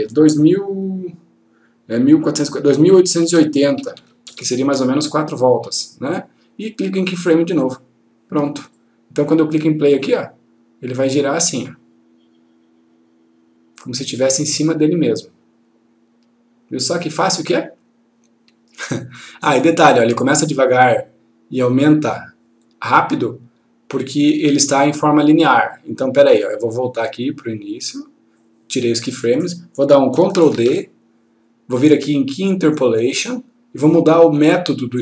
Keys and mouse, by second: 3.3 2, 7.7 click, 25.8 click, 33.1 click.